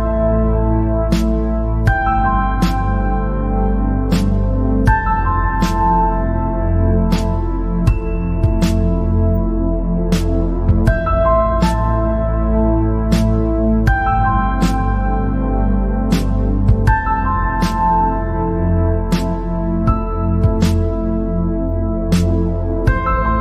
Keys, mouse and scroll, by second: 0.0-0.4 scroll up 1, 0.6 scroll up 2, 1.6 click, 2.5 click, 4.5 click, 5.9 click, 7.3 click, 8.5 g, 11.1 click, 12.0 g, 15.8 click, 16.1-16.5 scroll down 6, 16.5 middle click, 17.2-17.5 scroll up 4, 18.9 scroll up 3, 19.2 scroll down 1, 19.4-22.5 middle drag.